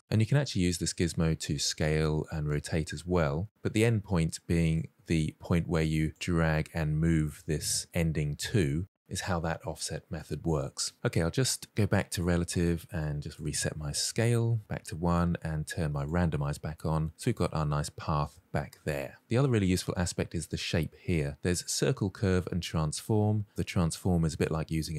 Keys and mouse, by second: 0.4 ctrl+z, 0.8-1.5 drag, 1.9 click, 2.8 ctrl+z, 4.5-6.1 drag, 6.6-7.8 drag, 12.8-14.5 drag, 15.8 click, 16.5 middle drag, 17.3 shift+middle drag, 17.5-18.3 middle drag, 18.8-19.4 shift+middle drag, 20.1-24.9 drag.